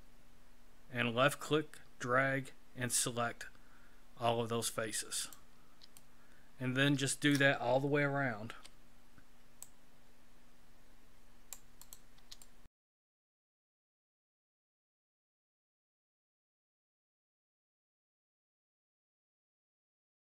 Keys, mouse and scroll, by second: 5.9 shift+middle click, 8.4 c, 12.4 shift+middle click, 13.1 c, 14.2 shift+middle click, 14.8 c, 16.5 shift+middle click, 17.1 c, 17.9 shift+middle click, 18.3 c, 19.2 shift+middle click, 19.6 c.